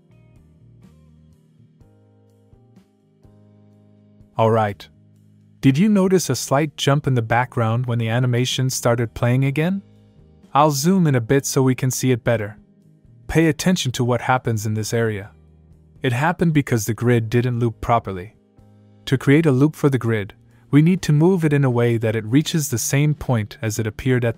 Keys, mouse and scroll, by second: 3.3 click, 3.9 space, 7.2 space, 10.5 scroll up 1, 11.2 middle click, 12.8 click, 13.4 space, 15.7 click, 16.3 space, 17.7 space, 18.0 click, 20.5 scroll down 1, 21.6 click.